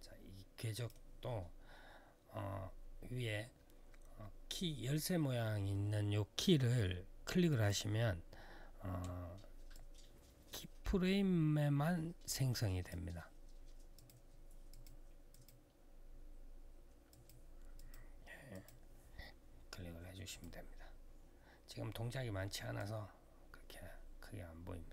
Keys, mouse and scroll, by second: 7.2 click, 9.5 click, 13.7 click, 14.4 click, 15.1 click, 16.8 click, 17.5 click, 18.3 click, 20.0 click, 22.5 click.